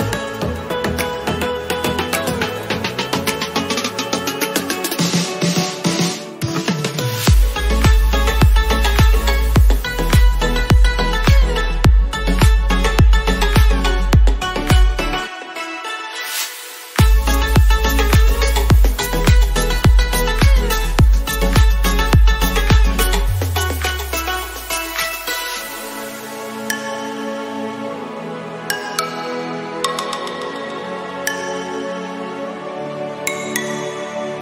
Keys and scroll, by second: 15.9 ctrl+0.